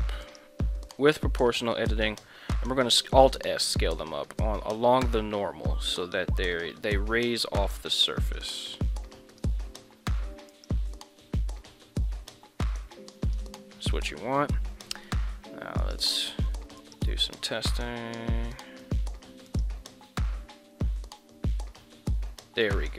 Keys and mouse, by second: 0.3 click, 0.9 o, 2.6 alt+s, 9.3 click, 10.5 right click, 11.5 alt+s, 13.3 click, 13.6 Tab, 13.9 middle click, 15.8 right click, 16.6 ctrl+Tab, 16.9 right click, 17.7 g, 18.9 click, 19.6 right click, 20.9 r.